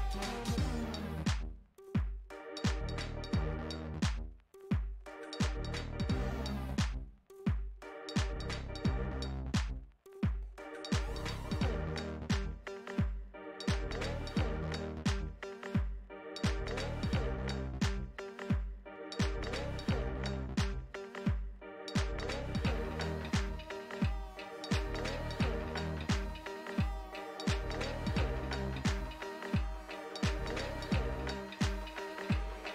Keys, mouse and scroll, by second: 2.4 middle click, 2.8 space, 3.7 f, 4.6-6.7 drag, 6.7-8.2 middle drag, 8.2-12.4 drag, 12.4 middle click, 13.3 click, 13.6 middle click, 14.3-16.2 drag, 16.2 middle click, 16.9 click, 17.4-18.4 middle drag, 18.4 click, 19.0 f, 19.6-20.8 drag, 20.8-21.9 middle drag, 21.9 shift+c, 22.5 f, 23.9-25.3 drag, 25.3 f, 26.4-29.6 drag, 30.6-32.7 middle drag.